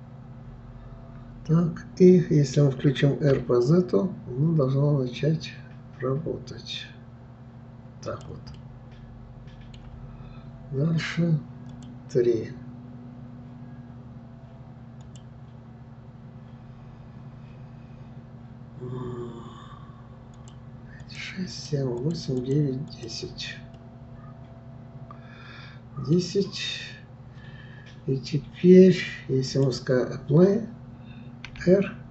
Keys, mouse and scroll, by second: 8.6-11.6 middle drag, 11.7-14.5 drag, 15.0-18.0 drag, 20.4-23.2 drag, 23.8-26.7 middle drag, 29.5 click, 31.5 r.